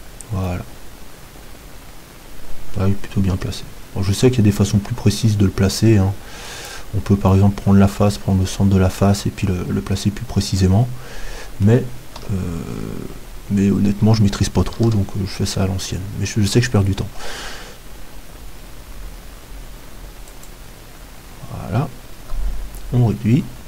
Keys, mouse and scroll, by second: 3.3 KP_7, 6.4-12.2 drag, 7.3-12.2 middle drag, 12.2 KP_7, 14.8 shift+a, 22.2 s.